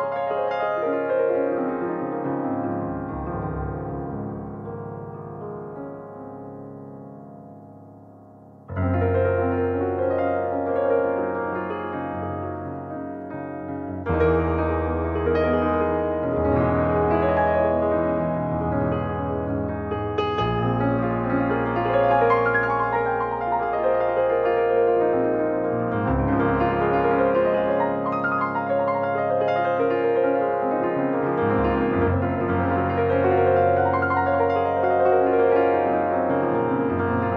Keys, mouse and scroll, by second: 4.9 click, 6.5-7.6 middle drag, 7.6 scroll up 3, 7.8 middle click, 8.1 scroll down 1, 8.2-9.5 middle drag, 9.5-9.9 scroll down 1, 9.9 middle click, 10.4 click, 11.3 click, 11.8 middle click, 17.8 middle click, 18.4 ctrl+s, 18.6 middle click, 19.2 shift+a, 22.2-23.6 middle drag, 23.6-25.9 drag, 26.0 click, 26.4 click, 27.5 middle click, 28.4 s, 29.4 middle click, 30.3 ctrl+s, 30.5-31.8 middle drag, 31.8 click, 32.5-36.1 drag, 36.8-37.1 scroll down 1, 37.1-37.3 middle drag.